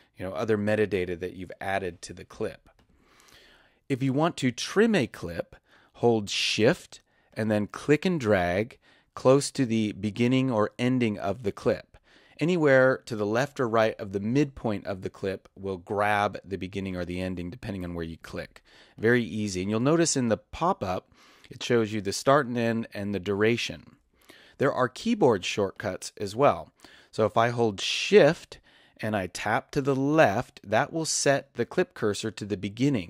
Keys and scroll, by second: 30.1 shift+Left.